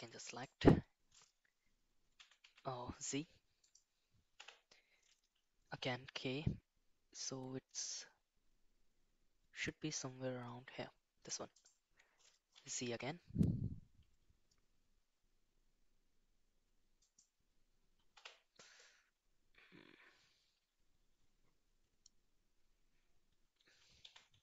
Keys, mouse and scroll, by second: 5.7 k, 24.0 g.